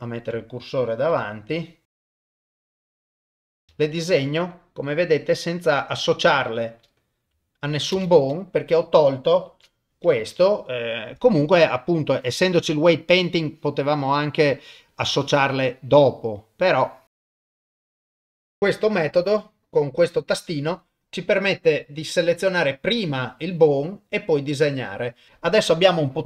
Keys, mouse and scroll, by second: 0.0 shift+right click, 1.1 KP_7, 1.9 KP_0, 2.1 click, 2.2 click, 2.4 click, 2.7 click, 3.3 click, 3.5 click, 3.7 shift+space, 7.9 shift+space, 9.5 shift+Left, 12.0 click, 13.5 click, 14.9-16.0 drag, 16.7 click, 17.5 click, 17.8 shift+space, 25.3 shift+Left, 25.3 shift+space.